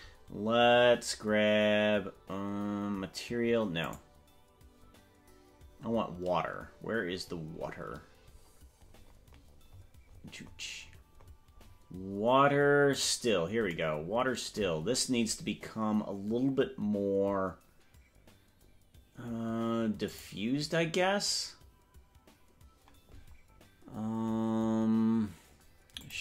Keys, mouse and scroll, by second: 4.0 right click, 7.3 scroll down 4, 7.5-7.9 scroll down 4, 8.3-8.7 scroll up 4, 8.9-9.3 scroll down 2, 9.5-11.5 scroll up 35, 11.7 scroll down 1, 13.0 click, 20.0 click.